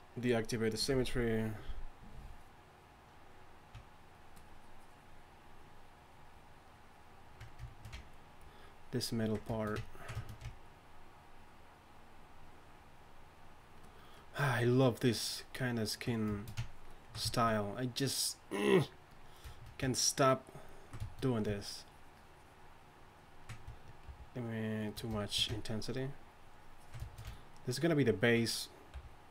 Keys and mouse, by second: 24.1 shift+f, 28.9 f.